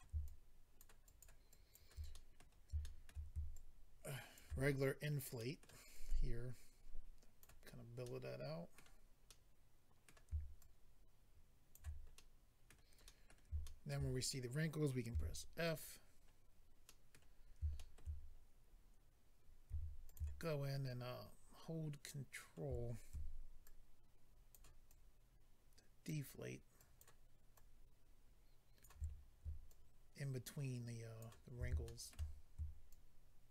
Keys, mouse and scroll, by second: 0.2 shift+click, 0.7 click, 1.0 click, 1.2 click, 1.4 shift+click, 2.1 middle click, 2.8 shift+middle click, 3.1 middle click, 3.5 ctrl+click, 5.4 middle click, 5.9 click, 7.6-8.0 scroll down 2, 8.0 middle click, 9.3 middle click, 10.6 shift+click, 12.1 middle click, 13.0 middle click, 13.6 shift+middle click, 13.9 middle click, 15.1 f, 15.6 click, 15.7 click, 16.0 scroll up 1, 16.8 middle click, 17.7 shift+middle click, 17.9 middle click, 18.2-19.2 scroll up 2, 19.7 f, 20.0 click, 23.6 ctrl+click, 24.8 ctrl+click, 26.7 ctrl+click, 27.5 ctrl+click, 29.1-29.6 scroll down 2, 29.6 ctrl+click, 31.8 shift+middle click, 32.3 scroll up 2, 32.9 ctrl+click.